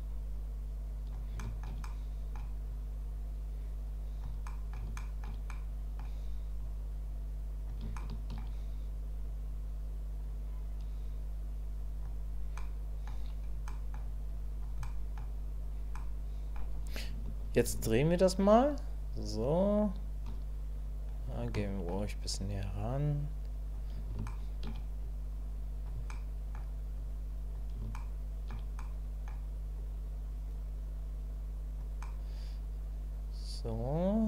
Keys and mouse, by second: 1.3 shift+middle click, 1.4 shift+click, 1.6 shift+middle click, 1.9 click, 2.7-4.2 drag, 4.5 middle click, 5.0 shift+middle click, 5.5 middle click, 6.6-7.7 drag, 8.0 shift+middle click, 9.3-12.0 drag, 12.6 click, 13.7 click, 14.3 click, 14.8 click, 15.9 click, 17.8-20.3 ctrl+drag, 21.5 shift+click, 22.3-23.7 drag, 24.3 shift+click, 25.1 click, 26.1 click, 27.1 click, 28.0 shift+click, 28.8 click, 29.9-31.8 drag, 32.0-34.2 drag.